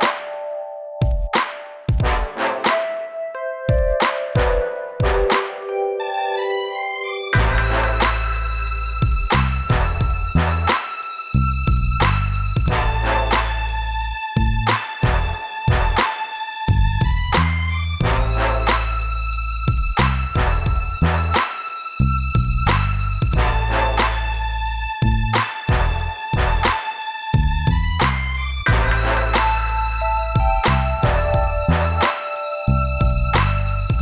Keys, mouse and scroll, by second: 0.2 click, 0.2 click, 0.6 click, 0.7 double click, 4.3 scroll down 2, 5.3-5.7 scroll up 1, 6.5 scroll up 1, 15.7 click, 17.1 click, 19.3 click, 19.4 click, 20.6 click, 22.3 click, 23.1 scroll up 2, 24.8 click, 24.9 click, 26.8 click, 26.8 click, 27.8 click, 27.9 click, 29.0 click, 32.1 click, 32.3 click, 33.2 b, 33.7 scroll down 2.